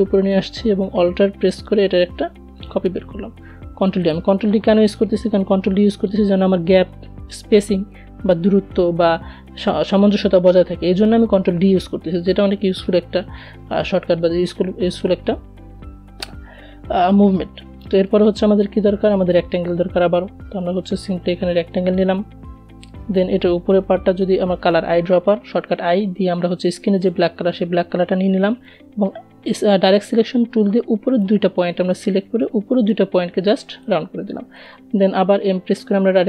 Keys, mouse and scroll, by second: 0.1-1.5 alt+drag, 1.5 d, 2.3 click, 16.4 right click, 17.5-23.2 drag, 23.2 i, 25.3 click, 26.1 a, 26.9-32.9 drag, 33.6 m, 36.1-36.2 drag.